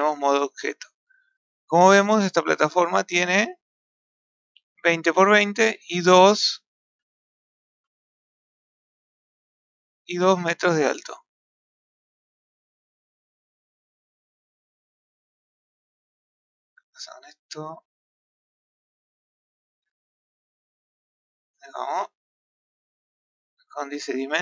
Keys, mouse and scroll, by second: 0.0 Tab, 0.9-1.3 scroll down 1, 1.3-1.6 scroll up 1, 1.6-2.0 scroll down 2, 2.0-4.2 middle drag, 5.4-5.8 middle drag, 7.1-10.9 ctrl+middle drag, 9.7 ctrl+scroll up 1, 10.9 click, 11.5-11.8 ctrl+middle drag, 12.2-13.9 scroll down 24, 13.9-15.5 scroll up 1, 15.5 click, 18.0 click, 18.7-20.8 ctrl+middle drag, 21.5-24.4 ctrl+middle drag.